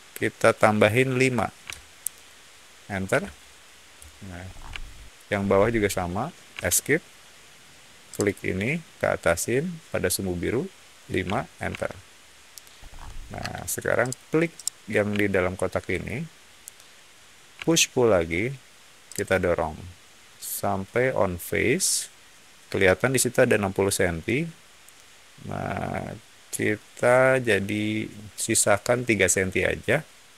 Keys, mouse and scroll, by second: 1.6 5, 3.0 Return, 4.4 scroll down 1, 4.7 shift+middle click, 5.3 scroll up 1, 6.4 Escape, 8.0 click, 11.2 5, 11.6 Return, 12.7 middle click, 13.3 space, 13.9 click, 14.5-15.9 middle drag, 17.5 p, 19.0 click.